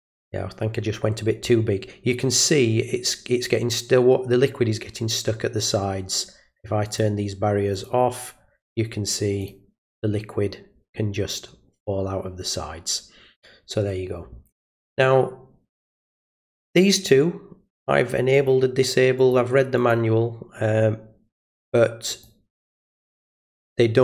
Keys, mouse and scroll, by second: 6.9 click, 7.7 click, 9.4 click, 16.9 click, 18.3 click, 19.2 click, 19.8 click, 22.1 click, 22.9 click.